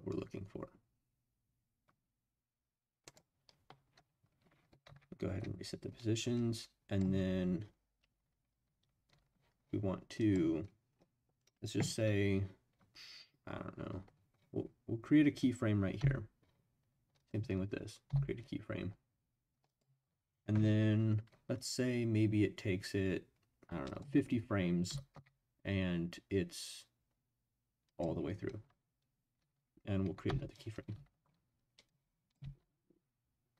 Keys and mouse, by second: 3.1 click, 4.9 ctrl+z, 6.4 middle click, 16.0 i, 18.1 i, 23.9 click, 24.9 g, 25.1 z, 27.8 click, 30.2 i, 31.8 click, 32.9 space.